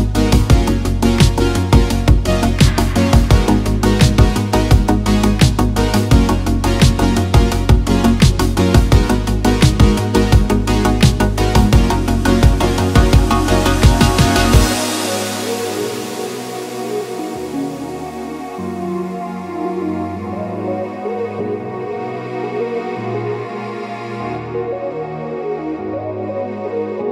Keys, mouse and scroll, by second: 1.1 click, 1.8-3.3 drag, 4.4 shift+middle click, 4.7 middle click, 5.2 shift+middle click, 5.3 shift+a, 7.0 r, 7.2 x, 7.4 KP_9, 7.5 click, 7.5 KP_0, 8.1 click, 8.7 s, 9.9 click, 10.4-11.4 drag, 11.6 s, 12.2 x, 14.1 click, 14.5-15.5 middle drag, 16.1 s, 16.2 x, 18.7 click, 19.1-20.1 drag, 20.3 s, 21.5 click, 22.7 Tab, 23.1 click, 23.8 click, 23.9 click, 24.5 click, 25.4 click, 25.6 shift+middle click, 26.3 click.